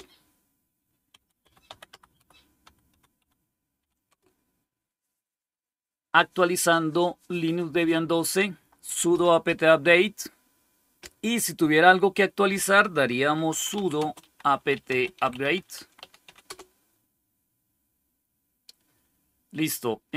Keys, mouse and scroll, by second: 0.0-4.5 typing, 13.0-16.6 typing.